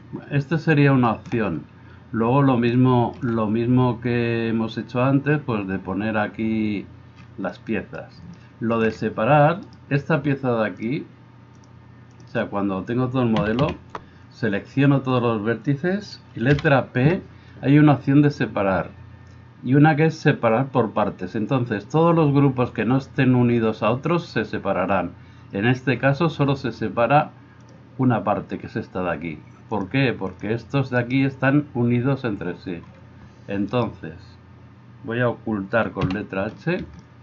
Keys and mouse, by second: 10.9 middle click, 11.5-36.1 drag, 13.3 a, 13.7 a, 16.5 p, 31.0 middle click, 31.0 right click, 33.7 middle click, 33.7 right click, 36.1-37.2 right drag, 36.1 h.